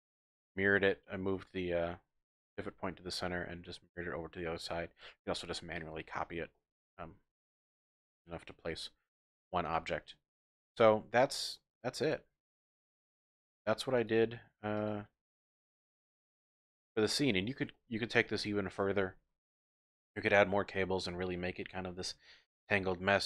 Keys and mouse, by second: 3.9-4.7 middle drag, 4.7 click, 6.5 drag, 6.9 Tab, 8.7 ctrl+r, 9.6 click, 9.8 Tab, 12.1-12.6 middle drag, 12.6 drag, 13.4-13.7 drag, 14.0 click, 15.7 x, 17.3 shift+drag, 17.7 drag, 21.2 shift+drag, 22.6-23.2 drag.